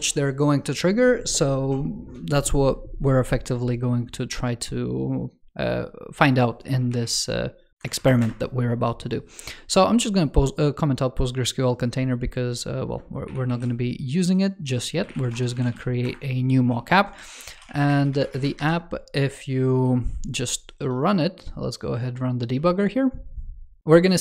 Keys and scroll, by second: 6.8 super+/, 7.8 super+Right, 13.1 super+/, 13.3 super+s, 17.0 super+Left, 19.4 super+t.